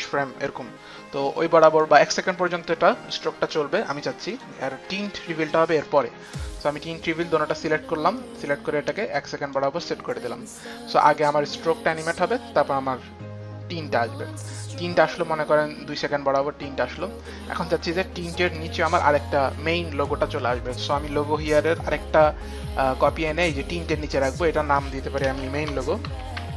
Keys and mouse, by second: 2.0 click, 4.5 click, 5.3 ctrl+click, 6.1 ctrl+click, 8.4 ctrl+click, 9.6 click, 11.3 click, 18.7 click, 21.8 click, 23.0 click, 25.4 click, 25.4 Return, 25.7-26.5 typing, 25.9 click.